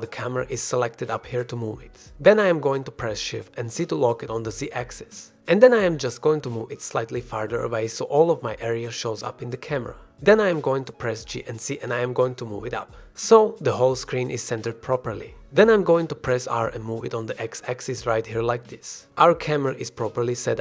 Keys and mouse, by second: 1.2 g, 4.5 shift+z, 10.6 g, 11.6 z, 15.8 r, 16.3 x, 16.9 x, 18.2 click, 18.3 g, 18.4 z, 20.4-20.6 drag.